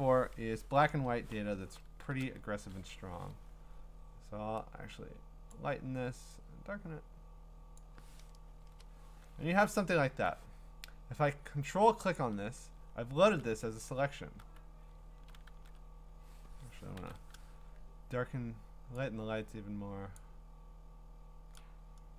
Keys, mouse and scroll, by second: 2.6 ctrl+l, 5.6 click, 7.8 click, 8.6 Return, 9.6 middle click, 9.7-10.8 scroll, 12.2 ctrl+click, 12.8 scroll, 13.8 q, 14.4 q, 15.0 scroll, 15.5 ctrl+d, 17.0 ctrl+i, 20.2 click.